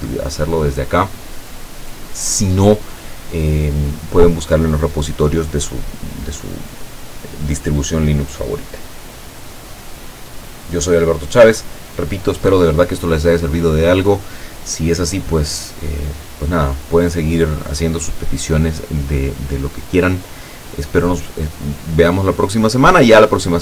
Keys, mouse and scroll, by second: 0.4 scroll down 2, 2.4-3.9 scroll up 6.